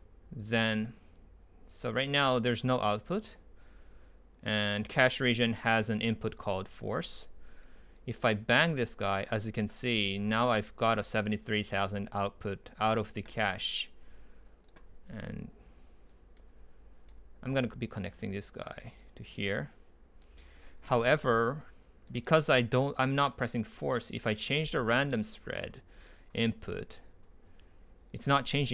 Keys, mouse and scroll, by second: 0.0-0.5 drag, 0.5-2.4 right drag, 2.4-2.8 middle drag, 2.8-5.2 right drag, 6.8 right click, 8.1 click, 8.7-10.1 right drag, 10.1-10.9 scroll up 2, 10.2-12.3 middle drag, 10.9-12.3 scroll up 1, 14.7-16.4 drag, 16.4 right click, 21.6 click, 21.8-23.9 right drag, 25.8 right click.